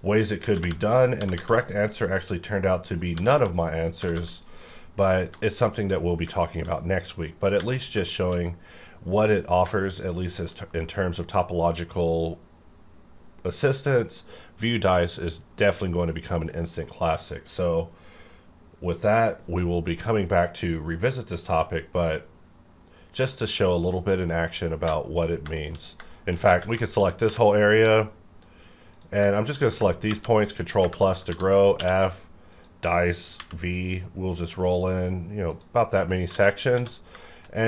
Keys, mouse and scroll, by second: 0.0-1.3 typing, 0.9 click, 1.5 click, 3.1 g, 3.3 g, 3.4 click, 4.0 g, 4.1 g, 4.3 click, 4.7-5.1 scroll down 1, 5.4 shift+middle click, 5.5-6.2 shift+scroll down 2, 6.3 shift+middle click, 7.3 scroll down 1, 7.5 Tab, 8.1 shift+middle click, 8.3-9.6 shift+scroll down 1, 9.6 scroll down 1, 9.8 shift+middle click, 24.9 Caps_Lock, 25.5 shift+middle click, 25.8 scroll up 1, 26.1 shift+middle click, 26.3 shift+scroll up 3, 26.6 Tab, 27.3-27.7 typing, 28.9 click, 28.9 click, 29.5 ctrl+click, 30.0 ctrl+KP_Add, 31.2-31.8 typing, 32.4 click, 33.4 v, 33.7-34.6 scroll down 1, 34.6-35.5 scroll down 1, 35.5 click, 36.3 alt+a, 36.5 scroll down 1, 36.8 Tab, 37.2 shift+middle click.